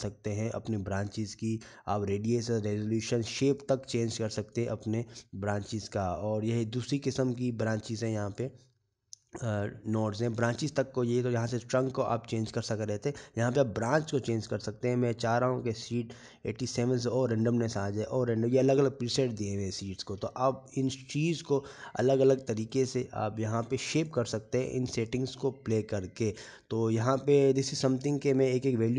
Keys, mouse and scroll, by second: 9.4 middle click, 15.6 click, 17.7 click, 21.6 middle click, 23.6 scroll down 2, 24.4 middle click, 24.4 scroll down 6, 25.0-25.7 scroll up 8, 25.8 shift+middle click.